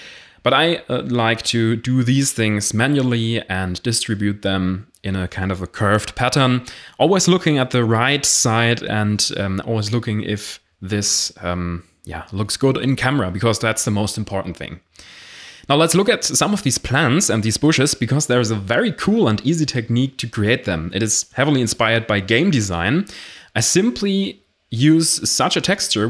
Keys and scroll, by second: 0.0-3.2 typing, 4.3-6.7 typing, 10.2 x, 10.5 alt+h, 10.7 a, 13.1 0, 18.1 Escape, 18.8 Escape, 19.0 shift+a, 22.6-23.2 typing.